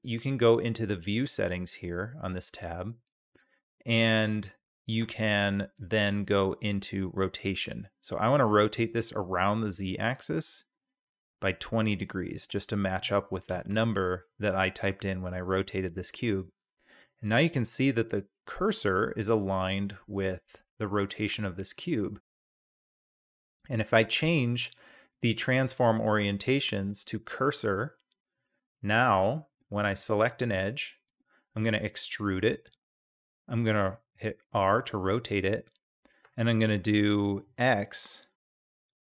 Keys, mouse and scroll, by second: 10.1-12.0 drag, 12.4-14.2 drag, 17.0-17.5 middle drag, 18.4-20.6 middle drag, 21.7-22.9 middle drag, 28.5 middle click, 29.4 middle click, 29.7 2, 30.6-31.1 drag, 31.9 middle click, 32.3 e.